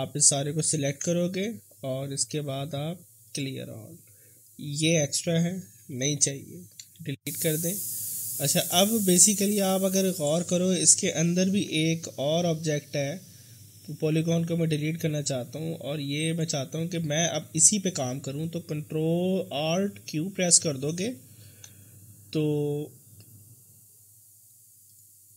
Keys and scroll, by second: 0.8 ctrl+a, 6.2 Delete, 11.9 F3, 20.4 alt+q, 21.7 alt+q.